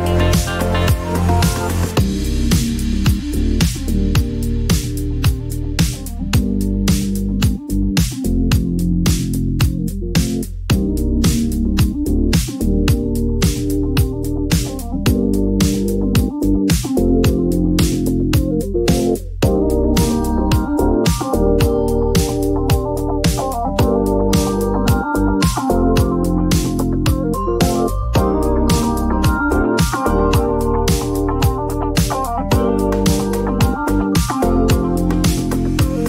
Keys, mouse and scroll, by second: 0.5 7, 3.1 Return, 5.9 click, 8.9 click, 9.4-10.7 typing, 13.1 click, 14.7 click, 17.9-18.3 typing, 18.7 Return, 20.6-22.0 typing, 20.9 click, 22.2 Return, 24.9 typing, 25.3 click, 27.3 click, 30.5 click, 30.9 typing, 32.3 click, 32.5-33.2 typing, 35.3 click.